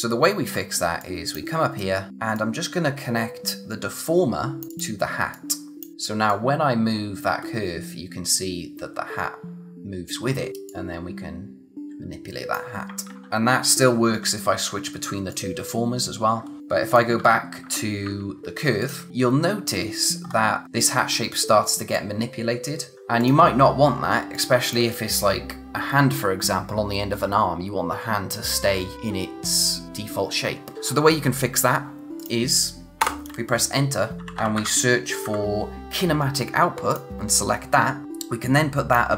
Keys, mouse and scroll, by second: 0.5-0.9 scroll up 1, 0.9 click, 2.4 click, 13.1 ctrl+z, 15.3 click, 17.2-18.1 typing, 18.8 click, 20.3-20.6 scroll up 1, 22.0 click, 22.9 scroll down 1, 23.2 click, 23.7-24.2 scroll up 1, 24.2 space, 24.3 click, 24.7 space, 32.2 click, 33.0 Return, 33.9-35.2 typing, 36.9 click.